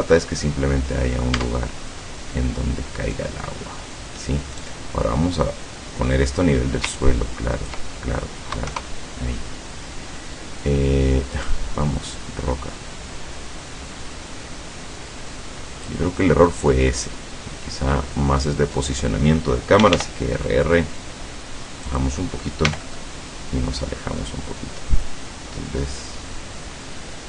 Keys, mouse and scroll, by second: 1.4 Tab, 2.0-4.5 middle drag, 4.7 right click, 5.5 middle click, 7.0 ctrl+click, 8.7 KP_0, 11.4 right click, 12.2-16.1 drag, 17.0 right click, 18.5 right click, 18.8 right click, 19.8 r, 21.9 click, 22.7 g, 22.8 middle click.